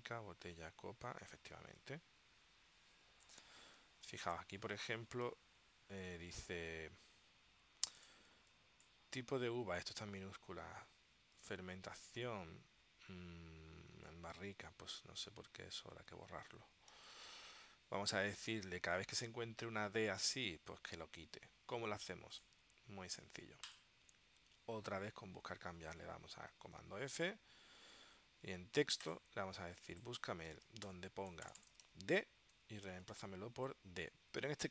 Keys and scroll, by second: 1.7 space, 5.3 super+Tab, 8.4 space, 17.1 super+Tab, 27.1 super+f, 30.6-33.2 typing.